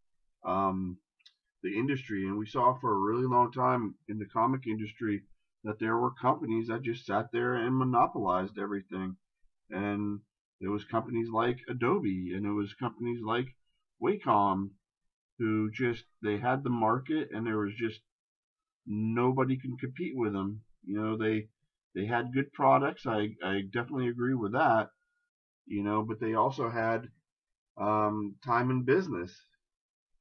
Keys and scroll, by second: 8.2 ctrl+KP_Add, 11.0 shift+space.